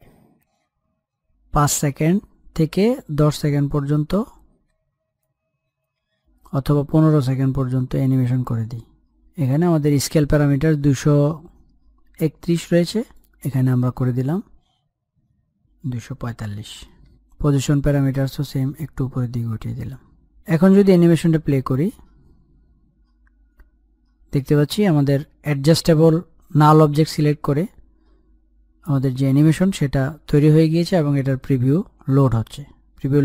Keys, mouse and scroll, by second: 7.5-11.1 drag, 14.5 click, 19.8-23.2 drag.